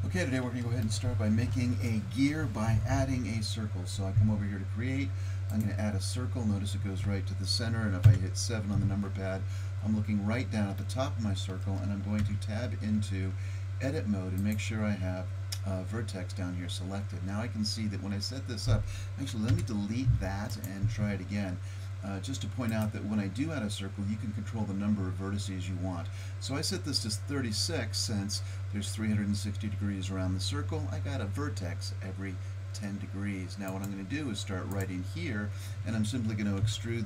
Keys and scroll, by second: 8.1 KP_7, 12.2 Tab, 19.5 Delete, 36.6 e.